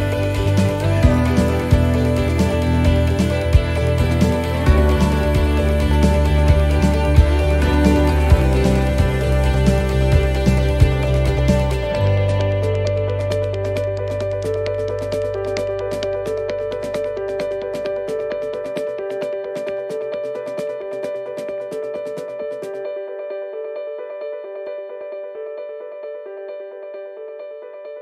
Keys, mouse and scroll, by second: 0.2 middle click, 1.0 right click, 1.4 shift+right click, 2.1 right click, 2.5 middle click, 3.6 shift+right click, 4.0 shift+right click, 5.1 shift+right click, 5.4 middle click, 5.8 scroll down 2, 6.8 e, 7.3 s, 9.0 middle click, 9.3-9.9 scroll down 5, 9.9 middle click, 10.5 scroll up 2, 11.0 middle click, 12.6 a, 12.7 s, 15.4 middle click, 16.1 shift+middle click, 16.4-16.8 scroll up 4, 16.7 middle click, 17.3 scroll down 3, 17.7 shift+middle click, 18.2 middle click, 19.9 click, 22.2 middle click, 22.7 scroll down 1, 22.8-23.2 scroll up 4, 23.4 middle click, 24.0-24.4 scroll down 2, 24.4 shift+middle click, 24.8 shift+scroll up 3, 25.0 scroll down 1, 25.1 middle click, 25.7-26.4 scroll up 4, 26.4 shift+middle click, 26.7 scroll down 1, 26.8 scroll up 4, 27.2 shift+middle click, 27.7-28.0 scroll down 7.